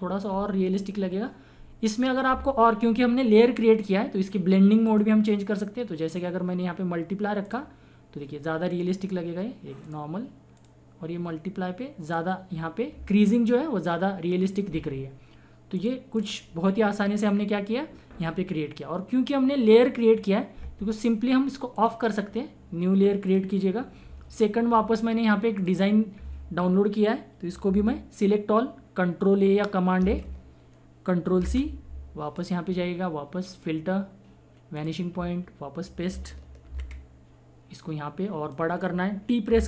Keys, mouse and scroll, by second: 4.9 click, 7.4 click, 15.7 click, 21.7 click, 25.5 click, 28.2 click, 30.0 ctrl+a, 31.6 ctrl+c, 32.3 click, 36.7 ctrl+v, 37.8-39.5 drag, 39.5 t.